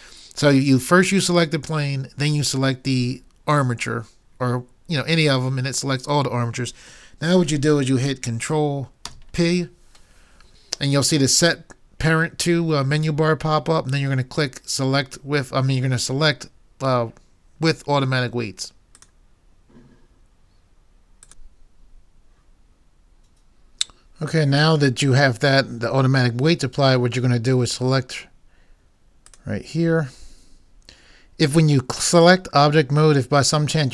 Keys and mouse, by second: 9.1 ctrl+p, 29.3 click.